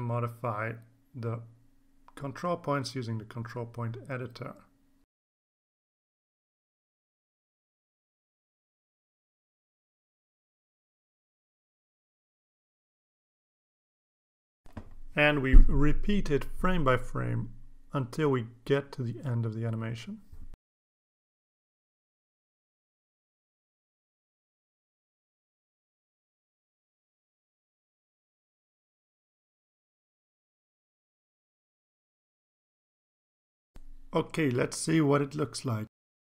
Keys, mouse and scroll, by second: 0.8 click, 1.5-3.0 drag, 3.5 click, 5.8-6.6 drag, 7.2-9.1 drag, 10.2-12.7 drag, 13.8-14.6 drag, 15.2 click, 15.5 right click, 16.2 click, 16.3 click, 16.4 click, 16.6 click, 17.4 click, 17.8 click, 18.0 click, 18.2 click, 18.6 click, 19.0 click, 19.3 click, 19.7 click, 19.9 d, 20.2 click, 20.3 click, 20.5 click, 20.7 click, 21.1 click, 21.2-21.6 drag, 21.7 click, 22.0 click, 22.2 click, 22.4 click, 22.8 click, 23.4 click, 23.7 d, 23.8 click, 24.0 click, 24.7 click, 25.1 click, 25.3 d, 25.4 click, 25.7 click, 26.0 click, 26.0 d, 26.3 click, 26.4 click, 26.6 click, 26.9 click, 27.0 d, 27.1 click, 27.2 click, 27.9 click, 28.2 click, 28.5 d, 28.6 click, 28.8 click, 29.0 click, 29.3 click, 29.5 click, 29.6 click, 29.8 click, 30.6 ctrl+s, 31.2 click, 31.6 click, 32.0 click, 32.6 click, 33.0 click, 33.7 scroll up 2, 33.9-34.2 scroll down 4, 34.7 click, 35.4 click, 36.0-36.2 drag.